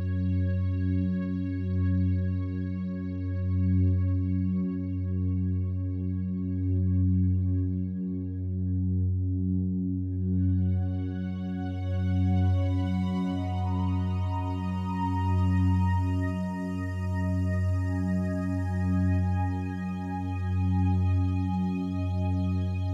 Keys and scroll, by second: 4.8 [, 12.1 [, 14.4 ], 17.6 space.